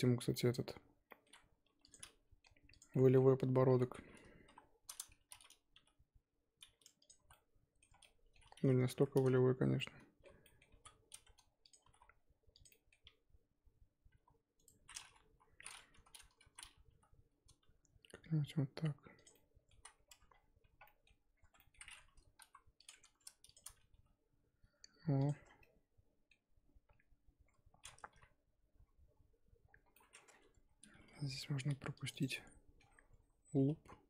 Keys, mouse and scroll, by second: 0.3 middle click, 0.7 z, 1.1 middle click, 1.6 2, 1.8 click, 2.0 scroll down 1, 2.0 middle click, 2.7 click, 2.9 middle click, 3.1-3.8 scroll down 1, 3.8 middle click, 4.4 KP_3, 4.7-5.2 scroll up 2, 5.2 z, 5.7 g, 7.2 z, 7.3 middle click, 7.9 scroll down 1, 8.0 middle click, 8.8 ctrl+z, 9.7 middle click, 10.7 g, 11.8 g, 12.7 middle click, 13.0 g, 15.2-16.4 scroll up 4, 15.3 KP_3, 16.4 z, 16.9 g, 19.3 middle click, 19.7 z, 20.0-20.8 scroll down 5, 20.1 Tab, 20.8 middle click, 21.3-22.4 scroll up 7, 21.4 Tab, 21.6 middle click, 22.4 KP_1, 22.7 click, 23.4 shift+click, 23.9 g, 25.4 Tab, 25.4 scroll down 5, 25.6-27.0 middle drag, 27.0-27.4 scroll up 3, 27.7-28.8 scroll up 3, 28.8-29.6 scroll up 2, 29.6-30.0 scroll down 3, 30.0 middle click, 30.3-30.7 scroll down 5, 30.7 Tab, 31.2 ctrl+r, 32.3 middle click, 32.9-33.4 scroll up 2, 33.4 s.